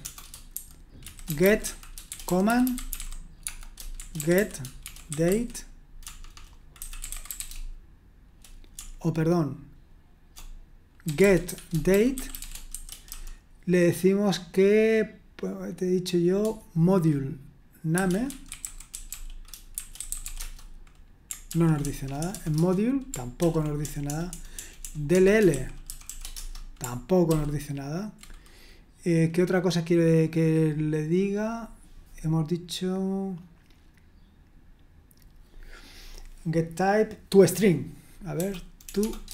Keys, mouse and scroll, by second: 0.3-13.6 typing, 17.7-22.7 typing, 21.5 ctrl+p, 23.4 ctrl+p, 23.8-26.0 typing, 26.3 Return, 32.6-33.4 scroll up 1, 33.6-34.5 scroll up 1, 38.8-39.3 typing.